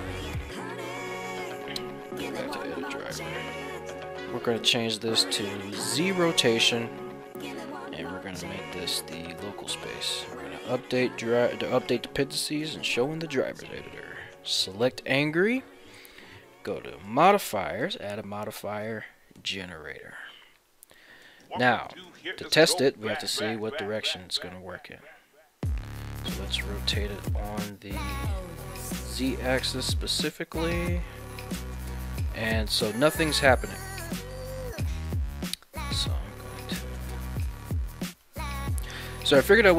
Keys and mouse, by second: 0.9-20.3 right drag, 21.3 right click, 21.9 ctrl+Tab, 22.5 middle click, 23.7 r, 28.1 z, 28.4 z, 34.4 right click.